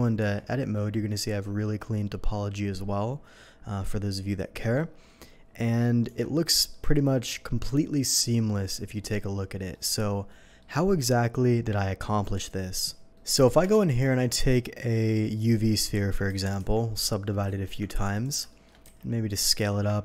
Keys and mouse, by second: 0.2 Tab, 1.0 click, 1.7 click, 2.5-5.6 drag, 6.1 Tab, 6.1-13.9 drag, 13.7 shift+a, 16.3 ctrl+1, 16.6 ctrl+2, 17.4 ctrl+a, 18.8-20.0 drag, 18.8 s.